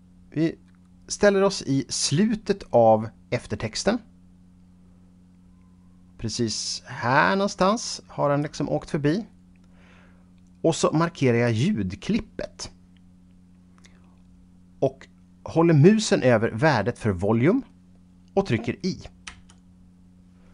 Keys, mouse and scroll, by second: 11.4 click, 19.4 i.